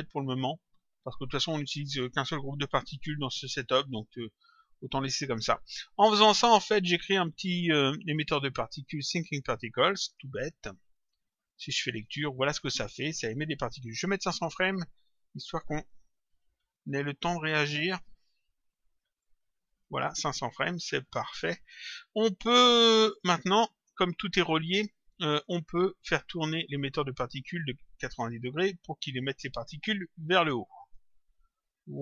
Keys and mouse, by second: 8.8 click, 10.8 click, 14.1 click, 17.2 Return, 19.2 click, 21.0 click, 23.0 click, 25.2 click, 26.7 click, 30.7 click, 31.8 click.